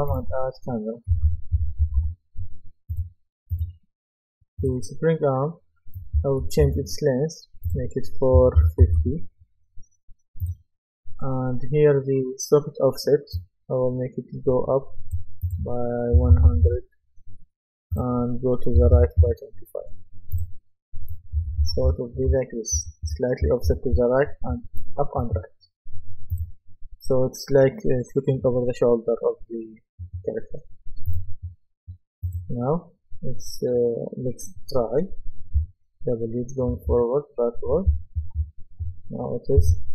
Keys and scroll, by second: 0.9-2.5 typing, 6.2-6.6 typing, 8.4 KP_4, 8.6 KP_5, 9.0 Return, 16.2 KP_1, 16.3 KP_0, 16.6 Return, 18.8 KP_2, 18.9 KP_5, 19.2 Return, 21.1-24.5 typing, 35.6 typing, 36.9 typing, 37.9-38.4 typing, 39.6 Escape.